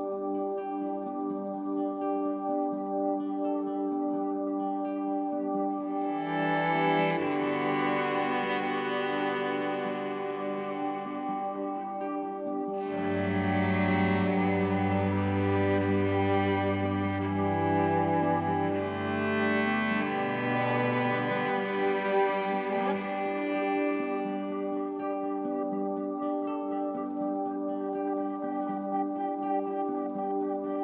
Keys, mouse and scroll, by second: 5.1-7.6 drag, 8.4-11.5 middle drag, 11.5-13.3 drag, 13.3 KP_0, 15.7 click, 21.9-24.2 middle drag, 24.2 click, 30.1-30.8 middle drag.